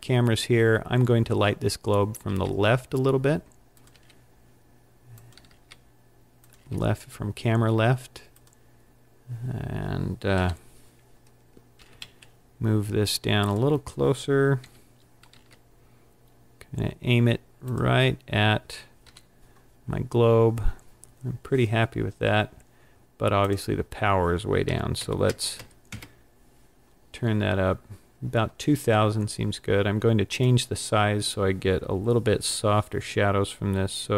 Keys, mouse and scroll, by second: 2.2 r, 3.9 click, 4.0 g, 6.5 click, 6.6 g, 8.5 click, 10.4 KP_1, 11.8 g, 13.6 click, 14.7 KP_3, 15.4 r, 17.9 click, 19.0 KP_1, 19.1 click, 19.1 KP_1, 23.4 click, 30.3 click.